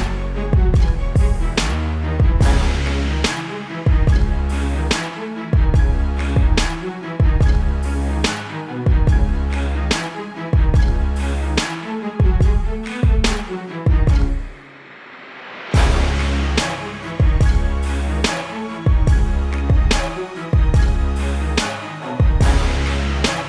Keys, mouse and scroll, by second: 0.3 shift+click, 0.8 click, 4.0 click, 7.5 right click, 8.4 click, 10.0 click, 10.3 KP_Enter, 11.1 click, 12.0 t, 13.0 click, 14.1 Return, 14.3 -, 14.9 -, 15.2 click, 16.1 click, 21.0 b, 21.4 click, 23.3 right click.